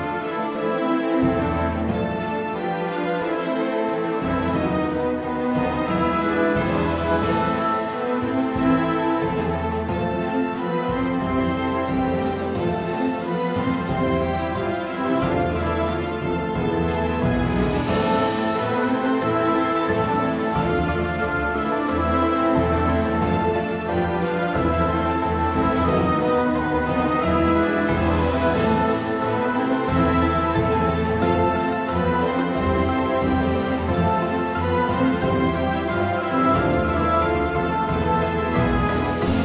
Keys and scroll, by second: 2.1 g, 4.8 KP_1, 10.7 s, 13.4 g, 14.8 s, 18.6 g, 28.3 a, 31.0 b, 31.3 s, 31.6 g.